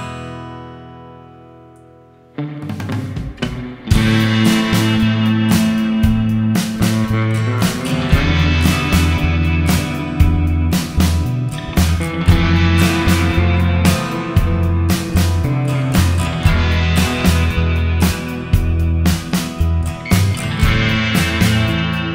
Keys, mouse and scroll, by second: 3.3 click, 9.5 click, 14.3 middle click, 20.4 middle click.